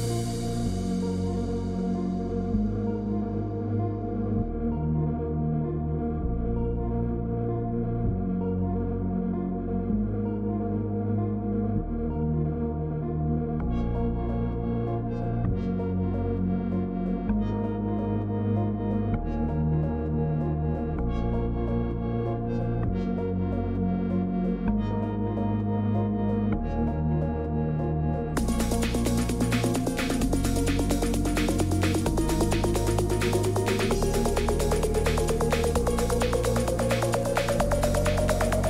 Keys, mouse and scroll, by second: 6.7 click, 8.3 click, 10.5 click, 11.8 click, 12.1 click, 12.6-16.2 scroll, 16.2-17.2 scroll down 10, 17.3-18.1 scroll down 6, 18.8 click, 21.2 scroll, 21.5 click, 21.8-22.3 scroll down 8, 23.9 click, 25.3 click, 27.1 click, 29.0 click, 30.3 click, 32.9 click, 36.4 click.